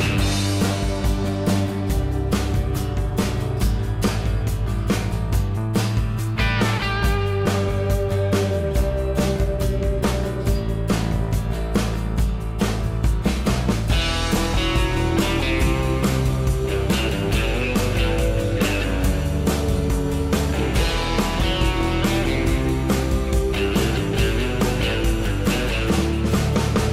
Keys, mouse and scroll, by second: 14.9 F2, 17.3 0, 26.5 5.